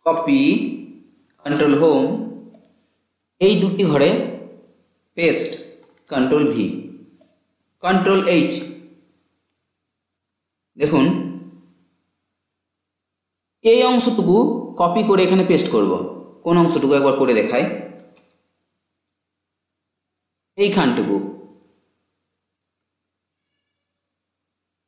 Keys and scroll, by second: 1.6 ctrl+Home, 6.2 ctrl+v.